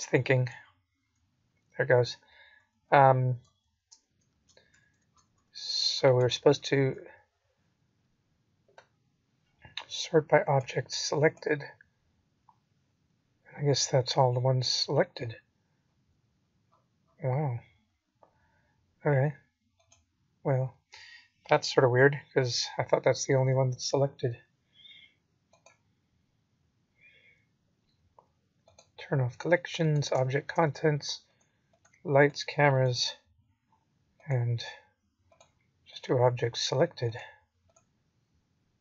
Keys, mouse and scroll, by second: 18.7 click, 18.7 right click, 22.1-23.3 scroll up 3, 23.3-24.7 scroll up 10, 24.7 click, 32.5-33.2 scroll up 3, 33.2-35.4 scroll down 29, 35.4-36.7 scroll up 14, 38.5 click.